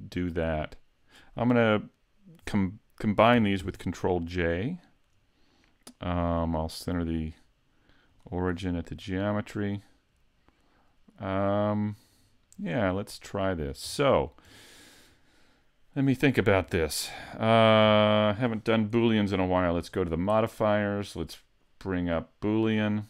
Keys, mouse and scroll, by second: 3.6 ctrl+j, 6.9 click, 9.3 middle click, 13.3-14.1 scroll up 1, 14.1 shift+middle click, 14.8 right click, 17.1 middle click, 19.9 click, 20.8 click.